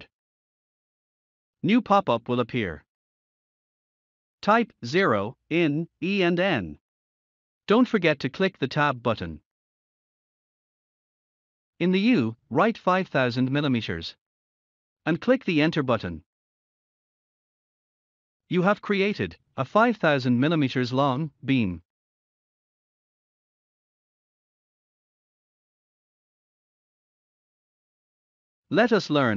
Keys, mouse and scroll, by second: 1.4 Return, 3.4 scroll down 2, 7.4-11.2 typing, 12.3-13.6 typing, 18.5-19.2 typing, 21.5-22.3 typing, 21.8-23.6 scroll down 1, 27.9-28.6 typing, 28.1 scroll up 1.